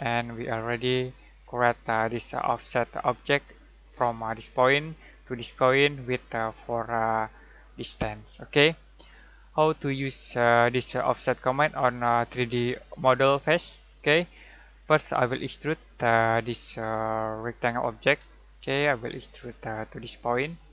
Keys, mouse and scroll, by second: 1.3-1.9 scroll down 1, 8.6 scroll down 1, 8.9-10.0 scroll up 1, 13.8 scroll up 1, 15.8 click, 18.3 middle click, 19.8 click.